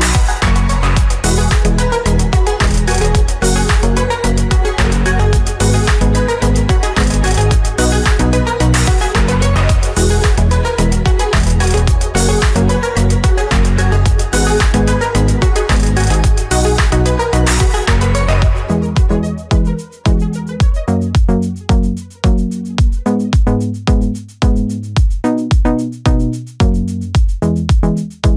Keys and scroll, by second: 0.2 ctrl+-, 2.4 space, 12.0 ctrl+alt+z, 20.2 ctrl+-, 21.2 ctrl+-, 25.6 ctrl+-.